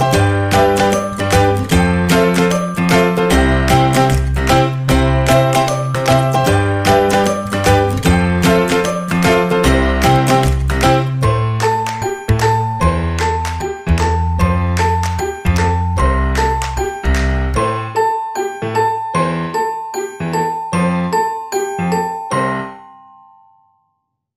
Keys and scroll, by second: 7.7 ctrl+=.